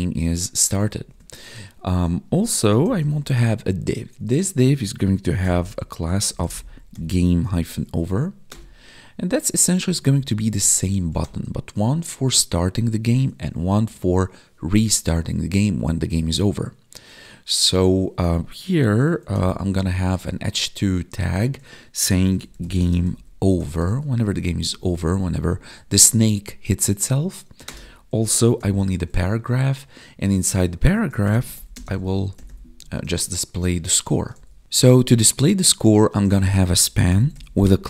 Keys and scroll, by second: 0.7 Down, 1.0 Tab, 8.0 Tab, 9.9 Down, 13.5 Up, 13.8 Tab, 20.1 Tab, 22.7 space, 24.6 ctrl+s, 24.8 Right, 28.7 Tab, 31.7 space, 36.1 space, 36.2 Left, 36.4 space.